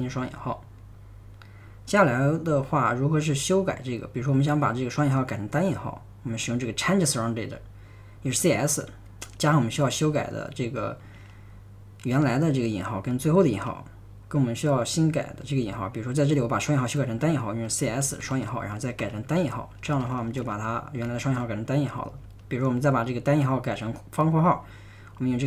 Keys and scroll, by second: 0.0-0.6 typing, 17.5-22.2 typing, 25.3-25.4 typing.